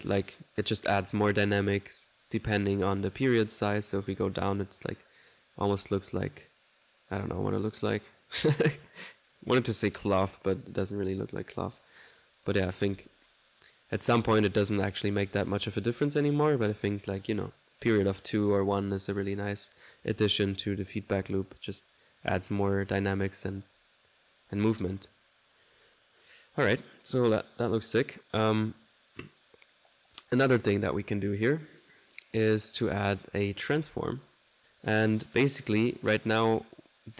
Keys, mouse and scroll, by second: 0.4 click, 2.1 click, 2.8 click, 3.6-12.0 drag, 5.8 1, 12.5 click, 15.2 click, 15.7 click, 17.0 click, 19.8 click, 20.4 click, 21.8 click, 22.3 click, 23.8 click, 28.8-32.8 drag, 32.8 right click, 33.3 click, 33.7-35.0 typing, 34.5 click.